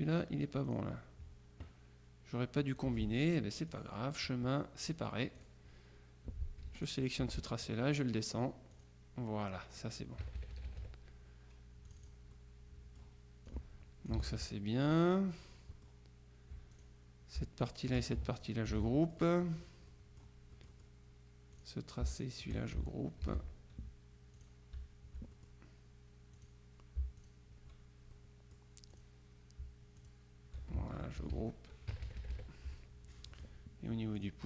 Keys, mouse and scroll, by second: 0.7 click, 2.9 F1, 3.8 click, 4.9 click, 6.8 F2, 6.9 click, 8.4-9.4 drag, 10.3 KP_Subtract, 12.0 click, 13.5-14.7 drag, 14.3 ctrl+z, 15.8-16.4 scroll up 2, 16.8 click, 17.7 shift+click, 18.8 ctrl+g, 19.1-19.9 ctrl+scroll up 2, 20.0-21.4 drag, 21.6-22.8 drag, 23.3 ctrl+g, 24.5 click, 25.4 shift+click, 26.4 click, 27.3 shift+click, 28.2-29.6 drag, 30.1 shift+click, 31.3 ctrl+g, 32.0 KP_Subtract, 33.3 click, 34.3 click.